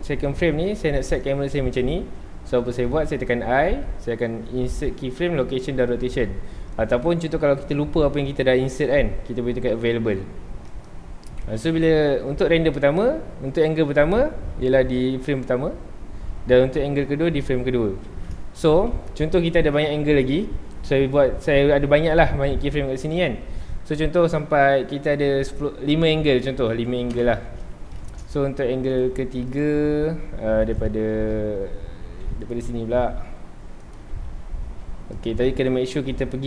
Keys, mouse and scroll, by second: 14.5 Left, 17.2 Right, 18.5 ctrl+s, 26.1-27.2 drag, 27.2 KP_Enter, 28.0 shift+middle drag, 28.3 scroll up 1, 28.8 click, 29.5 click, 30.0 g, 30.0 g, 30.8 right click, 31.7 g, 32.5 click, 32.6 r, 33.9 click, 34.2 g, 35.2 click.